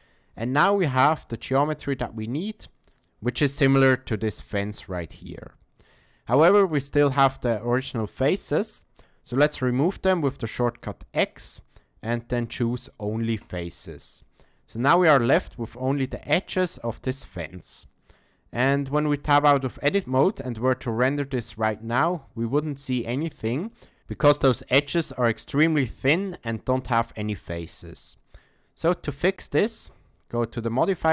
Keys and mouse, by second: 0.5 shift+middle click, 0.9 middle click, 1.4 shift+middle click, 6.2 shift+middle click, 6.7 ctrl+middle click, 7.3 shift+middle click, 10.6 x, 14.2-14.8 shift+middle drag, 16.3 shift+middle click, 18.6 Tab, 19.3 shift+middle click, 21.8 shift+middle click, 22.4-23.0 ctrl+middle drag, 23.3-23.7 shift+middle drag, 29.1 click, 30.8 click.